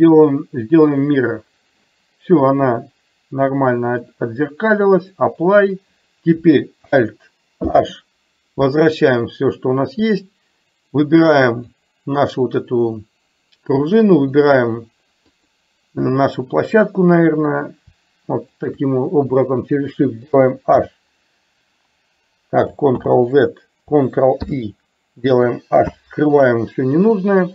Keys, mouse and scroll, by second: 4.0-5.2 drag, 8.0 alt+h, 11.6 click, 14.2 shift+click, 15.5 click, 18.7 shift+click, 20.8 h, 23.1 ctrl+z, 24.5 ctrl+i, 26.0 h.